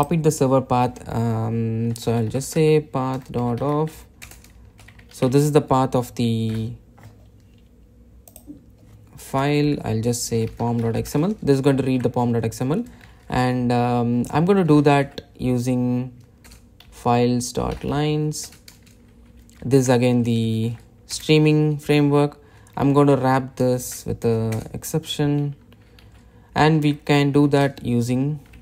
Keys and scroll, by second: 4.6 Return, 5.5 super+v, 17.0 Return, 22.2 Delete, 24.1 alt+Return.